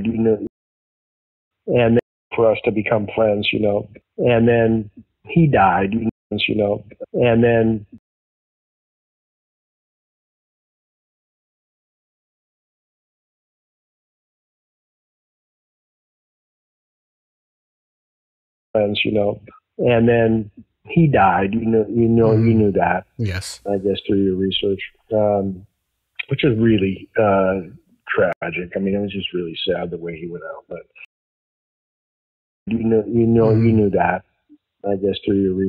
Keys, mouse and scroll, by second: 0.4 space, 1.1 ctrl+shift+Delete, 1.4 space, 1.9 space, 2.1 click, 2.2 space, 5.5 click, 6.0 space, 6.2 click, 6.2 space, 7.9 space, 8.2 click, 9.0 click, 10.4 click, 11.7 click, 12.4 click, 13.8-15.3 drag, 15.6 click, 16.3 click, 17.2 click, 18.1 click, 18.5 click, 21.7 click, 23.4 click, 25.4-27.7 drag, 28.2 Delete, 29.2 click, 29.8 click, 30.9 space, 31.3-32.3 drag, 32.5 click, 32.6 space.